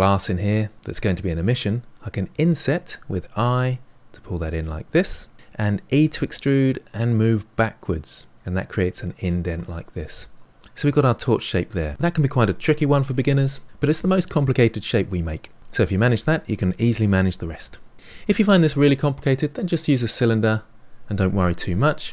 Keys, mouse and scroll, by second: 2.2 i, 6.0 e, 9.0-10.6 middle drag.